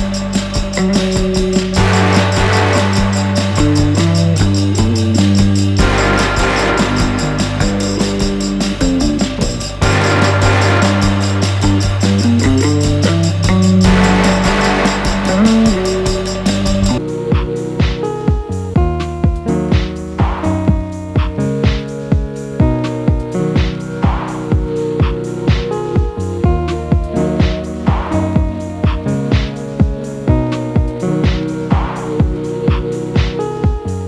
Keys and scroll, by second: 10.2 ctrl+z, 11.7 alt+Delete, 12.8 ctrl+d.